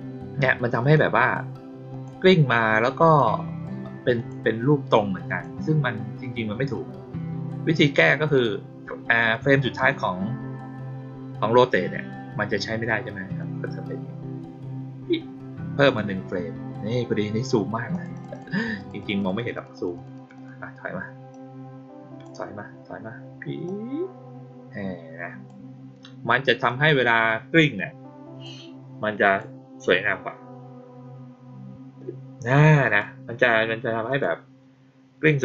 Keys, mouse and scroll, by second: 0.7 click, 1.8 click, 3.0 click, 4.1 click, 5.2 click, 9.1 click, 13.3-15.8 drag, 17.8 click, 18.1 click, 18.2 click, 18.7 click, 18.9 click, 19.1 click, 19.3 click, 19.5 click, 19.7 click, 19.9 click, 20.1 click, 20.3 click, 21.2-22.1 drag, 23.6-25.4 drag, 26.6-28.3 drag, 29.2 click, 32.8 click, 34.0 click.